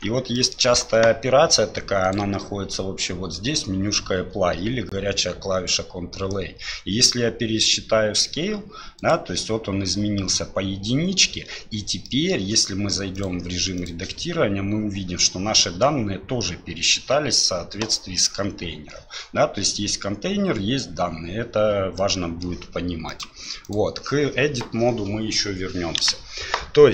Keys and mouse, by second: 0.3 middle click, 2.0-9.1 drag, 12.0 middle click, 13.2 click, 22.0 middle click, 23.1-23.7 drag, 26.0 KP_1.